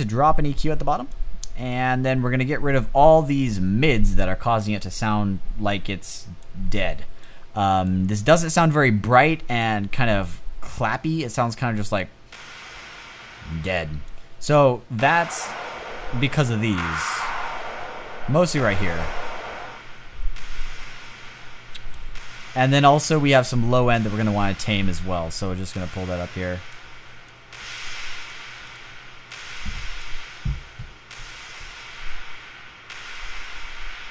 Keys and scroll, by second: 11.6 space, 13.1 space.